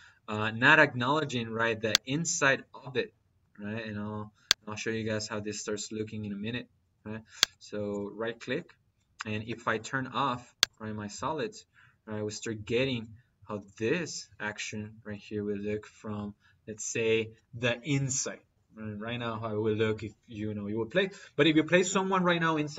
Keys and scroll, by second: 1.0 -.